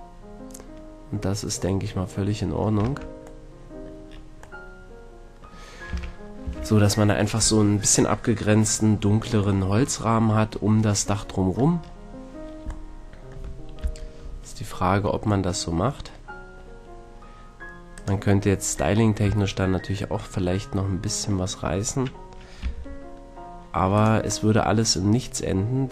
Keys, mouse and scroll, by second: 2.8 Tab, 5.9 a, 6.4 a, 10.9-13.8 middle drag, 13.8 KP_3, 17.9-18.9 middle drag, 18.9 click, 19.2 a, 19.5-22.0 middle drag, 22.6 b, 24.4-25.5 middle drag.